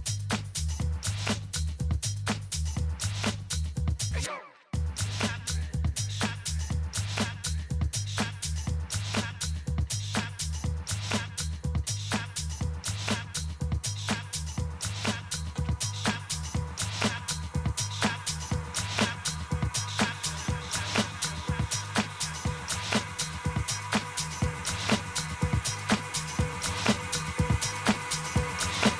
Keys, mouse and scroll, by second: 0.6-2.6 drag, 1.3 a, 2.3 b, 7.3 g, 9.8 a, 10.8 b, 12.7 g, 15.2 a, 17.1 b, 18.5 g, 22.5 a, 23.8 b, 26.1 g.